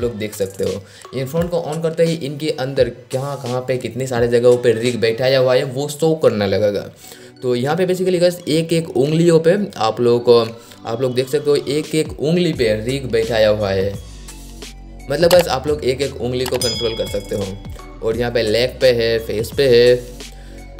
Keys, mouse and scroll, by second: 7.9-9.7 drag, 9.7 scroll up 1, 11.1-11.5 scroll down 1, 16.4-19.8 drag, 19.8-20.2 scroll down 1, 20.3-20.7 scroll up 1.